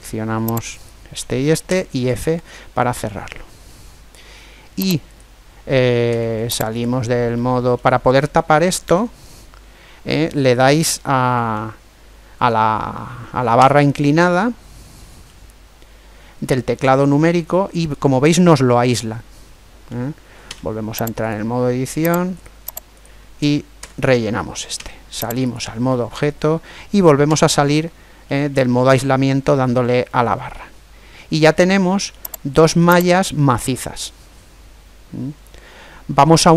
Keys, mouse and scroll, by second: 1.4 f, 2.1 middle click, 2.3 right click, 2.5-4.2 middle drag, 4.9 right click, 5.9 Tab, 7.2-10.0 middle drag, 13.3 KP_Divide, 15.1-17.0 middle drag, 20.2 Tab, 22.1 right click, 23.5 f, 24.5 Tab, 25.6-27.0 middle drag, 27.0 KP_Divide, 27.3 middle click, 28.1 middle click, 29.6-31.7 middle drag, 32.2-33.7 right drag, 33.7-35.0 middle drag.